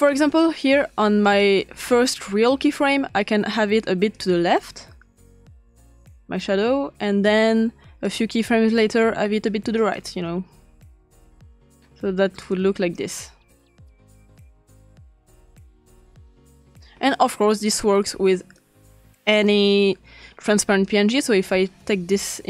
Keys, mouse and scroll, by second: 0.0-1.0 drag, 1.2-3.1 drag, 4.1-7.3 drag, 8.0 click, 8.8 click, 9.9-11.8 drag, 12.5-13.0 drag, 13.8 click, 14.3 click, 16.7 click, 18.6-19.5 drag, 19.8 click, 20.8-22.4 drag.